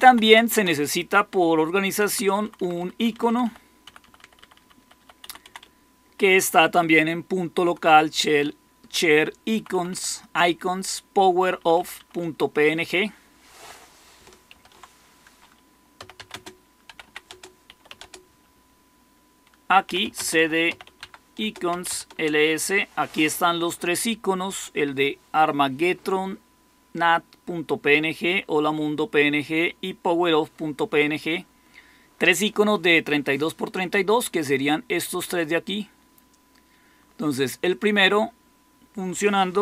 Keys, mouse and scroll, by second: 0.0 Left, 0.5 Left, 1.8 Right, 2.0 Right, 2.2 Right, 2.3 Right, 2.5 Right, 2.9 Right, 3.0 Right, 3.4 Right, 3.8 Right, 4.3 Right, 4.5 Right, 4.9 Right, 5.1 Left, 5.4 Left, 5.5 Left, 6.0 Left, 6.3 Left, 7.5 Right, 7.8 Right, 9.5 Right, 9.7 Right, 9.8 Right, 11.3 Right, 11.5 Right, 11.9 Right, 12.1 Right, 14.4 ctrl+x, 15.7-18.1 typing, 17.2 Return, 19.5-22.2 typing, 21.3 Return.